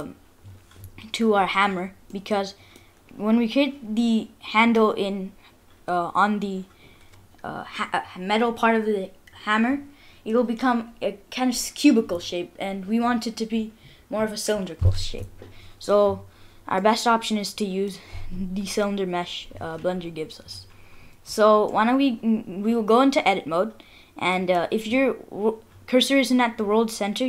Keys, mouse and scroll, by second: 1.7-2.1 scroll up 3, 4.0 middle click, 16.8 middle click, 21.7 middle click.